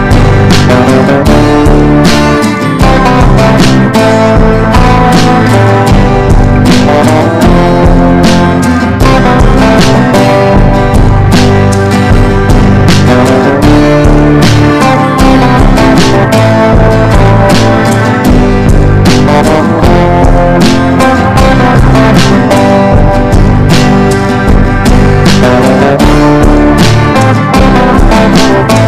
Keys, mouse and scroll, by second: 4.8 click, 5.1 Down, 5.2 Down, 5.4 Down, 5.9 click, 8.0 shift+click, 8.7 click, 14.1-18.4 drag, 21.1 shift+click, 21.8 click, 24.1 Delete, 24.5 click, 25.0 Delete, 25.5 click, 28.5 right click.